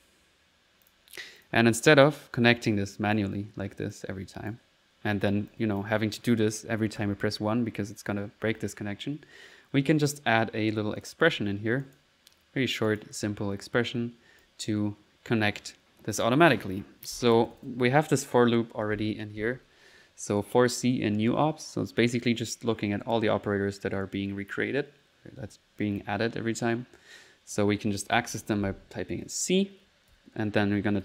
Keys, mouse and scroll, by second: 0.9 click, 1.2-2.0 typing, 1.4 click, 1.9 click, 2.3 middle click, 2.7 click, 3.7-4.4 typing, 3.9 click, 5.5 click, 7.0 1, 11.0 click, 11.3 a, 11.8 click, 12.2 middle click, 12.9 click, 16.5 click, 16.7 click, 17.4 Return, 18.1 Up, 27.3 typing, 29.1-31.0 typing.